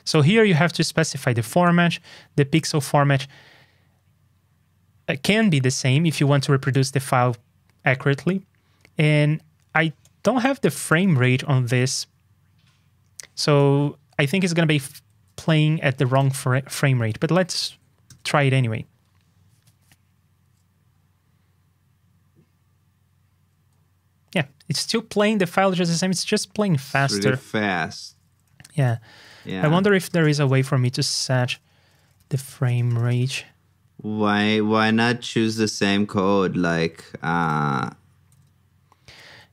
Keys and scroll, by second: 15.1 super+c, 17.5 super+v, 27.4 super+Tab, 28.7 super+n, 35.3 ctrl+Tab, 38.4 super+Tab.